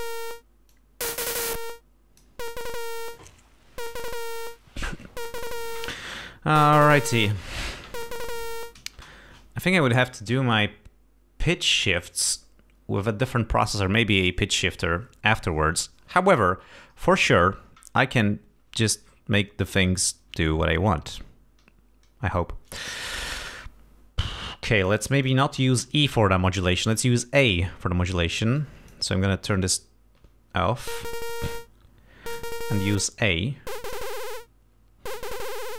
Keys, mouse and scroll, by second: 0.0 click, 0.8-2.5 drag, 9.0 space, 24.9 click, 25.3 click, 28.7 click, 30.3 l, 33.3 click.